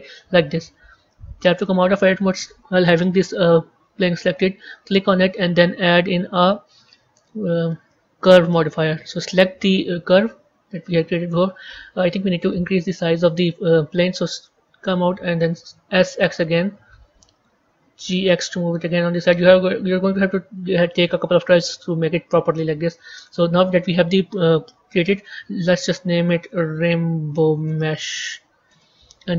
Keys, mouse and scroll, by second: 1.3 Tab, 8.5 click, 9.8 click, 14.2 b, 20.6 Tab, 24.8 click, 28.6 click.